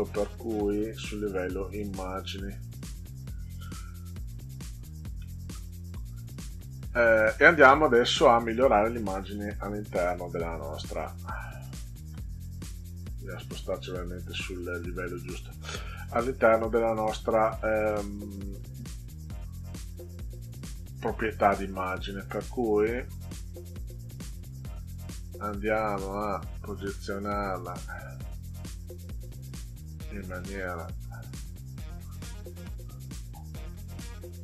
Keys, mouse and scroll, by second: 1.7 click, 5.2 middle click, 6.0 ctrl+scroll down 2, 7.3 middle click, 8.3 click, 9.4 click, 10.2 click, 12.9 click, 15.8 click, 18.6 click, 19.4-19.8 scroll up 2, 20.8 click, 25.7 click, 26.2 click, 26.4 click, 26.6-34.4 drag.